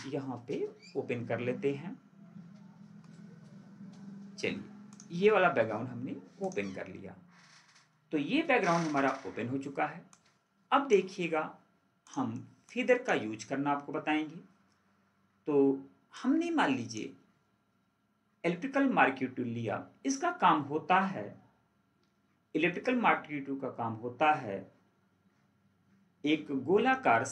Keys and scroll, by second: 8.7 ctrl+4.